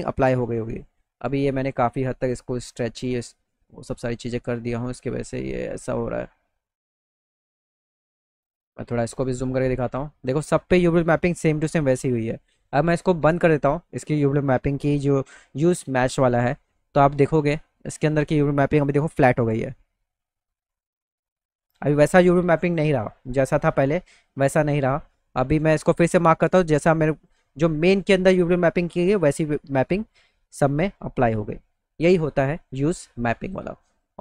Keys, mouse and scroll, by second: 2.2 click, 7.1 click, 7.4 click, 7.8 click, 8.0 click, 16.3 click, 22.7 middle click, 23.6 middle click, 24.3 middle click, 26.7 click.